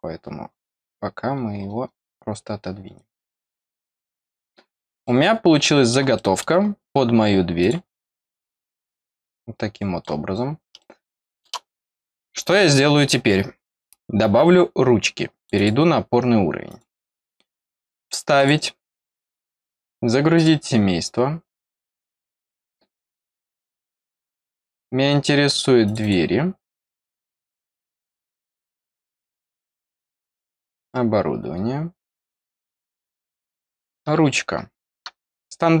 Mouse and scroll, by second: 1.2 scroll down 1, 1.8 scroll down 2, 2.5 scroll up 2, 3.1-4.1 drag, 4.5 scroll down 2, 5.0 middle click, 6.1 middle click, 6.6-7.0 scroll up 4, 7.5 click, 8.1-10.0 middle drag, 10.0-10.3 scroll down 2, 10.7 middle click, 11.7-12.1 scroll up 2, 12.4 scroll down 1, 15.3 click, 15.5 click, 16.6 click, 18.3 click, 20.3 click, 22.8 click, 23.0 click, 24.5 click, 25.8 click, 25.9 click, 29.6-30.0 scroll down 1, 30.5 click, 30.7 click, 32.7 click.